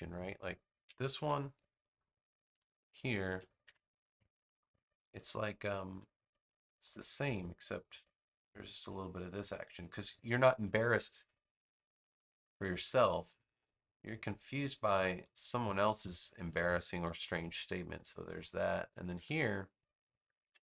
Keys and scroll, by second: 1.1 super+c, 1.6 space, 3.5 super+v, 17.1 space, 20.3 super+v.